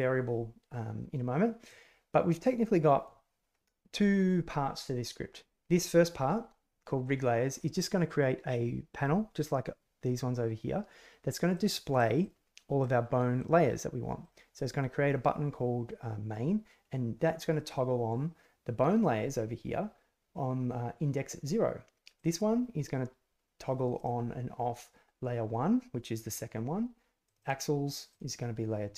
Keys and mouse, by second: 1.6-3.0 drag, 11.5 middle click, 11.5 click, 11.7 middle click, 12.8 middle click, 14.2 click, 14.5 click, 22.1 click, 23.9 click, 27.2 click, 28.0 click.